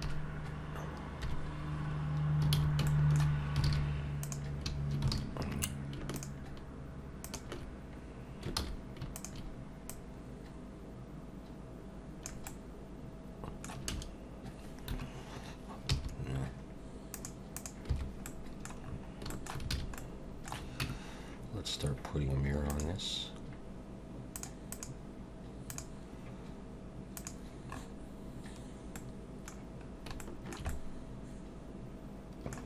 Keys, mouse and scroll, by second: 0.1 KP_3, 1.2 KP_1, 2.5 a, 2.9 shift+middle click, 3.7 alt+a, 4.2 click, 5.1 alt+a, 5.4 scroll up 2, 6.2 shift+click, 7.2 shift+click, 8.6 ctrl+z, 9.2 shift+click, 9.9 click, 12.5 middle click, 17.9 n, 18.3 middle click, 18.8-19.2 scroll down 4, 19.3 shift+middle click, 19.7 alt+a, 20.0 middle click, 20.8 Tab, 22.7 click, 24.4 click, 24.7 click, 27.2 click, 27.7 scroll up 4, 29.0 middle click, 29.8 scroll down 3, 30.2 shift+middle click, 30.7 middle click.